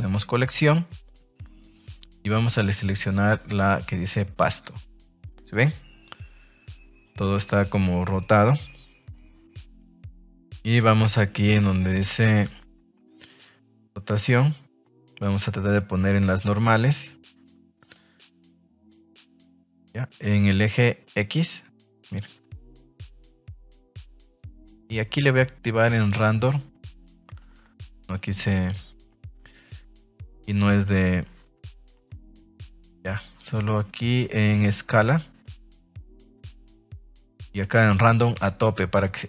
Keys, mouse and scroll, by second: 2.5-3.8 drag, 6.3-7.1 middle drag, 7.5-8.3 middle drag, 8.8 middle click, 13.7 click, 14.4 click, 15.0-16.6 drag, 17.8-19.0 drag, 21.0-24.3 middle drag, 26.5 click, 27.6 ctrl+z, 31.2 click, 33.0 click, 35.0-37.3 drag, 38.1-39.2 drag.